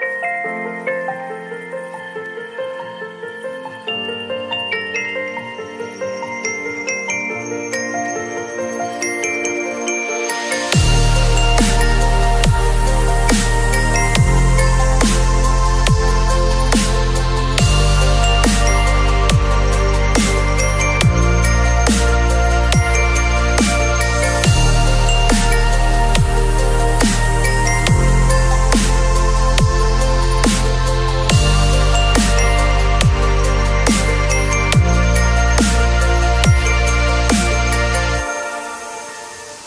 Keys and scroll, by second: 0.2 ctrl+c, 0.5 ctrl+w, 1.9 ctrl+v, 2.2 ctrl+t, 23.8 space, 26.0 ctrl+l, 31.2 Return, 31.9 space, 32.0 ctrl+a, 32.3 ctrl+c, 32.5 ctrl+w, 33.1 ctrl+v, 33.4 ctrl+t.